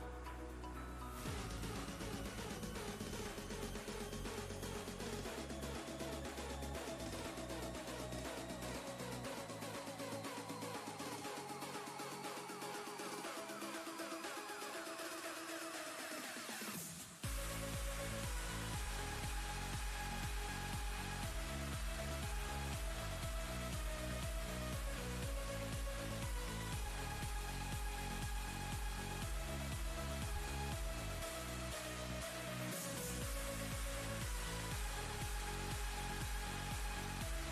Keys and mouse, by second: 14.1 g, 15.2-18.6 click, 21.5 ctrl+space, 21.7 ctrl+click, 22.0-23.0 ctrl+space, 24.6 click, 27.3 ctrl+space, 27.4-28.3 ctrl+click, 27.9 ctrl+space, 28.9-32.8 drag, 33.8 ctrl+space, 33.9-35.1 ctrl+click, 34.3 ctrl+space, 35.8 click, 36.4-37.5 alt+click.